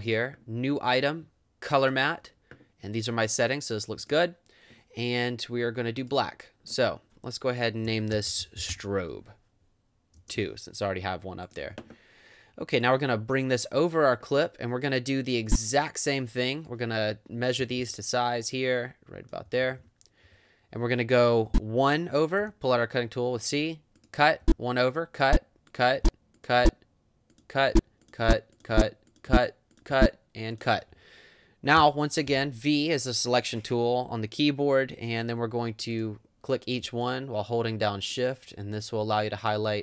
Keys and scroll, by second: 7.6-10.4 typing, 17.6 space, 19.5 =, 21.5 Right, 22.4 c, 24.4 Right, 31.8 v.